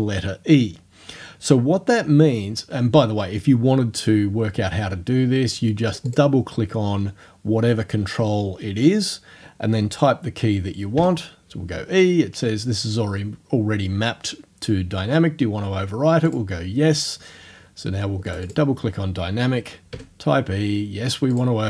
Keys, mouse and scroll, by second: 5.9 click, 11.0 e, 16.3 click, 18.3 click, 19.9 e, 21.4 click.